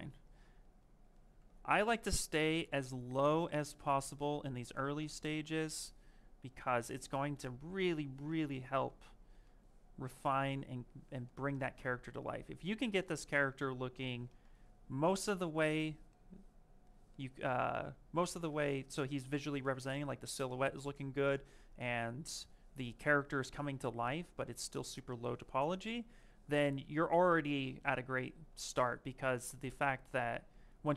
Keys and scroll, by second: 3.9 ctrl+z.